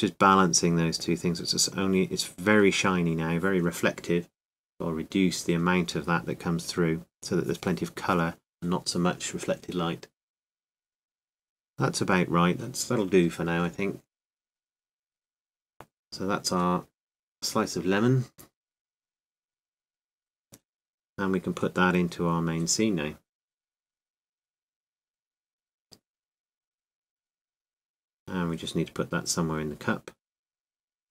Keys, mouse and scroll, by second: 10.5-15.8 middle drag, 15.8-21.8 drag, 23.3-25.1 drag, 25.1 middle click, 26.2 m, 28.4-31.1 drag.